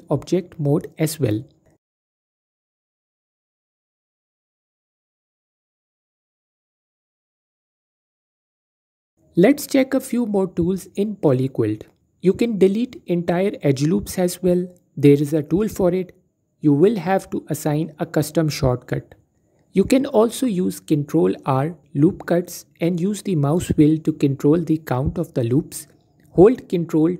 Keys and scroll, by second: 3.4 Tab, 12.9 typing, 18.5 ctrl+r, 27.0 a.